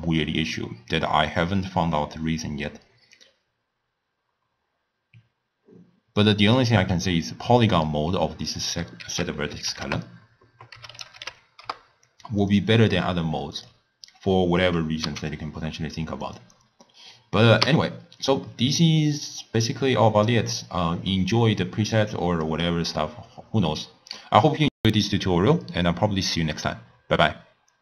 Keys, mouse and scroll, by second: 12.0 ctrl+a, 15.4 x.